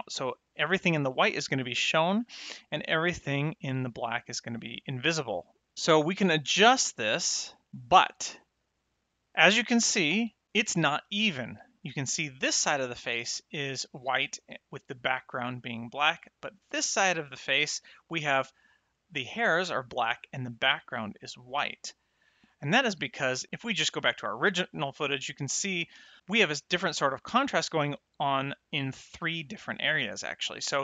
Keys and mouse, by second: 2.2 middle click, 5.0 middle click, 5.7 click, 23.3 middle click, 24.0 ctrl+shift+click, 25.2 middle click.